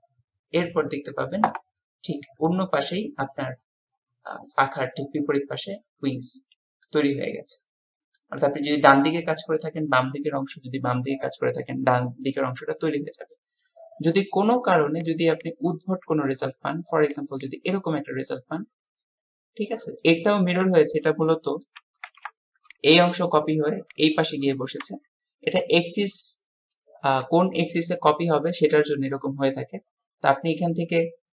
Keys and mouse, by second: 1.9-2.5 drag, 1.9-2.5 middle drag, 1.9-2.5 right drag, 5.7-7.0 drag, 5.7-7.0 middle drag, 5.7-7.0 right drag, 7.6-8.3 drag, 7.6-8.3 middle drag, 7.6-8.3 right drag, 13.8 click, 13.8 middle click, 13.8 right click, 16.1 middle click, 17.1 click, 17.4-17.9 drag, 17.9-21.0 middle drag, 21.4-21.8 middle drag, 26.1 middle click.